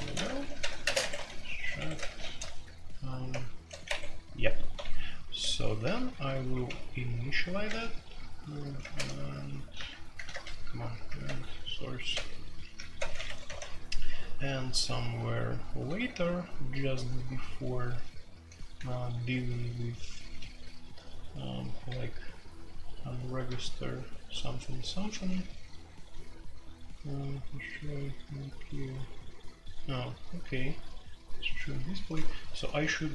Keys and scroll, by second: 0.0-2.0 typing, 1.0 Escape, 1.7 Escape, 3.0-18.7 typing, 13.2 Escape, 13.4 F2, 20.1-25.8 typing, 27.7 j, 31.9-32.4 typing.